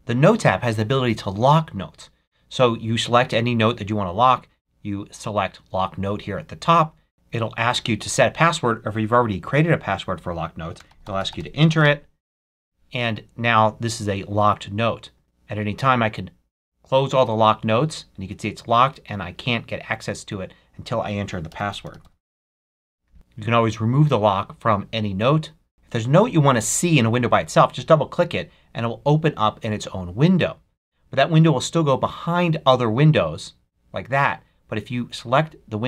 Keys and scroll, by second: 7.8 Return, 11.7 Return.